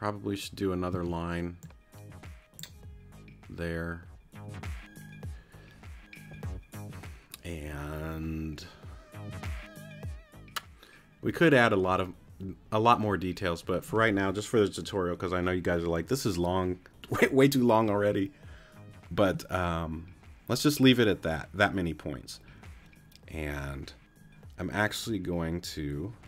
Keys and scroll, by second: 0.9 a.